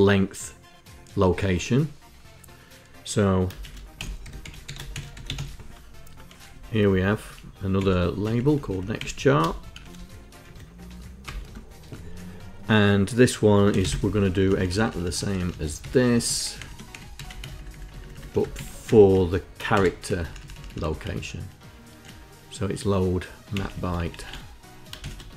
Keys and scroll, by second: 3.0-5.5 typing, 6.1 Left, 6.3 Left, 6.5 Left, 6.6 Left, 6.9 Left, 7.4 Delete, 7.8 x, 8.0 Left, 8.3 Left, 8.6 Delete, 9.3 shift+n, 10.0 End, 10.8 Return, 11.1 Tab, 13.1-13.9 typing, 14.0 Up, 14.1 Up, 14.3 Up, 14.5 Up, 15.0 Up, 15.1 Up, 15.4 Home, 15.9 Home, 16.2 shift+Down, 16.7 Up, 17.0 shift+Down, 17.6 shift+Down, 17.7 shift+Down, 18.1 ctrl+Insert, 18.6 Down, 18.7 Down, 19.3 Insert, 19.3 p, 19.7 Up, 20.1 Up, 20.3 Up, 20.4 Up, 20.6 Right, 23.1 Delete, 23.3 Delete, 23.4 Delete, 23.5 Delete, 23.8 Delete, 24.7-25.3 typing.